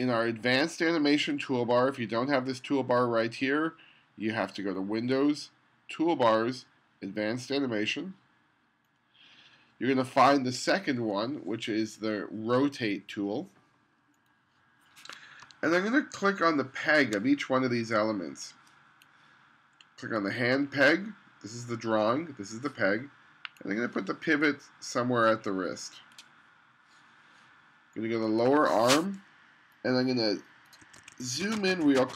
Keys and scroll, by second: 15.5 space, 30.9 2.